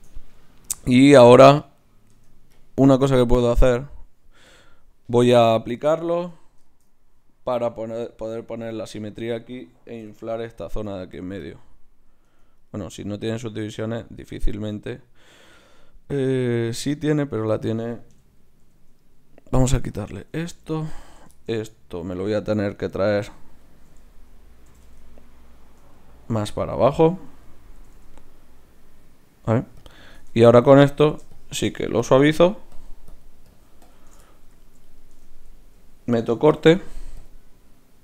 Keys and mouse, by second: 2.1 Tab, 4.5-6.2 drag, 6.2 Tab, 6.6-8.3 middle drag, 8.3-10.4 drag, 8.3 right click, 10.0 i, 10.4 f, 10.9-13.1 drag, 12.2 Tab, 12.6 right click, 16.3 z, 18.1 KP_Divide, 18.6 z, 19.9-21.8 drag, 20.9-22.0 middle drag, 20.9-24.6 right drag, 24.6-25.9 middle drag, 24.6 g, 25.9-28.7 right drag, 27.4-28.7 drag, 27.7 g, 30.3 Tab, 31.3-35.1 drag, 31.3-33.5 right drag, 34.2 right click, 35.1 Tab, 36.6 ctrl+r.